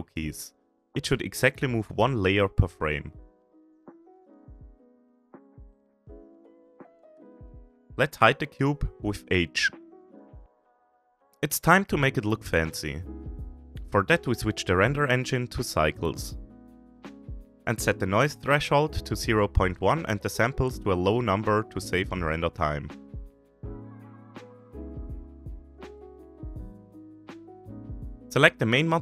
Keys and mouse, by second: 0.0 Right, 0.2 Right, 0.5 Right, 0.7 Right, 0.9 Right, 2.0 shift+drag, 2.3 shift+drag, 3.3 shift+middle drag, 3.3 shift+drag, 3.5 shift+middle click, 4.9 Right, 5.4 Right, 5.8 Right, 6.1 Right, 6.4 Right, 8.5 h, 9.4-9.7 shift+drag, 10.5 click, 11.0 shift+middle click, 11.3 shift+middle drag, 12.2 shift+middle click, 14.1 click, 15.2-16.1 drag, 17.1-17.5 shift+middle drag, 18.3-19.3 drag, 21.9-24.0 drag, 25.4-26.9 drag, 28.1 shift+middle click, 28.2 ctrl+s.